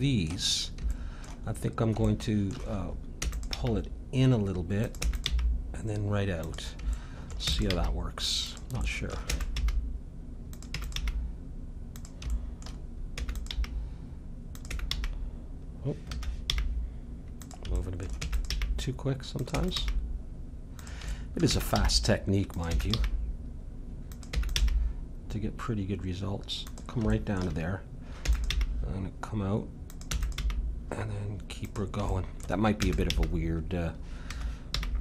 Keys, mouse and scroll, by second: 0.0-3.5 middle drag, 3.2 e, 3.6 g, 5.0 e, 5.3 g, 7.4 e, 7.7 g, 9.3 e, 9.6 g, 10.7 e, 11.0 g, 13.1 e, 13.5 g, 14.7 e, 16.5 g, 17.7-19.6 middle drag, 18.2 e, 18.5 g, 19.6 e, 19.8 g, 21.1-22.7 middle drag, 21.5 e, 21.8 g, 22.7 e, 22.9 g, 24.4 e, 24.6 g, 27.1 middle click, 28.2 e, 28.5 g, 29.8 click, 30.1 e, 30.4 g, 32.2 middle click, 32.8-34.7 drag, 32.8 e, 34.7 g.